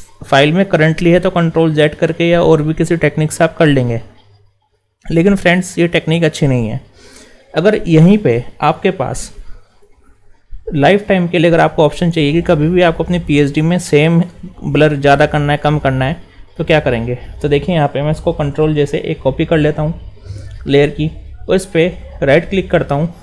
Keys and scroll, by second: 18.5 ctrl+shift+j.